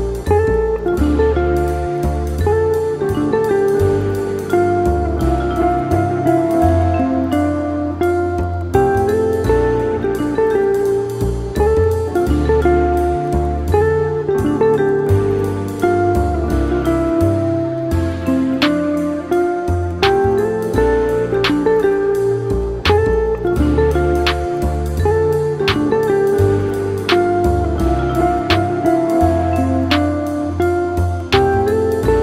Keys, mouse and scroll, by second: 1.5-2.0 scroll up 2, 2.0-4.2 shift+middle drag, 4.2 click, 5.1 click, 6.2-8.7 drag, 10.3-13.7 drag, 13.7 scroll up 2, 14.1-16.5 shift+middle drag, 16.5 s, 23.5-27.1 drag, 27.1 scroll down 1, 27.4-28.3 middle drag, 28.3-28.7 scroll down 2, 28.7-31.2 shift+middle drag, 31.2 shift+a.